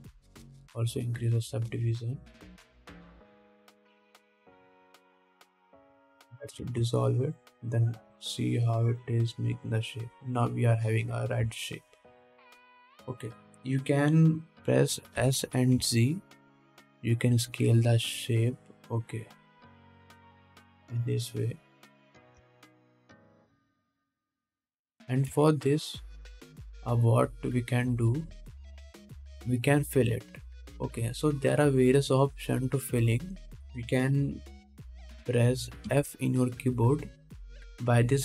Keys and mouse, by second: 2.0-4.2 middle drag, 2.0-4.2 right drag, 4.6 right click, 4.9 Tab, 5.3 alt+a, 5.9 2, 7.3 ctrl+x, 7.9 ctrl+Tab, 9.9 middle click, 9.9 right click, 16.4 s, 21.9 middle click, 21.9 right click, 23.6 Tab, 24.1 alt+a, 26.5 2, 27.9 middle click, 29.0 2, 29.6 alt+middle click, 37.1 f.